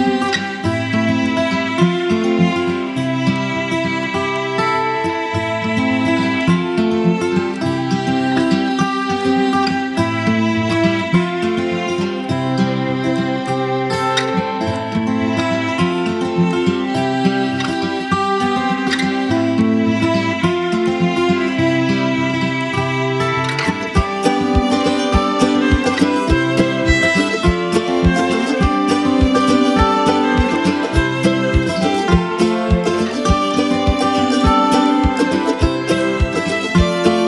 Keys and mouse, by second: 0.9 click, 3.1 click, 7.2 right click, 8.1 click, 12.8 click, 16.2 click, 18.6 click, 19.6 Delete, 20.5 click, 22.3 click, 24.5 click, 27.0 Delete, 29.1 click, 32.7 space, 32.9 click, 33.3 space, 34.1 click.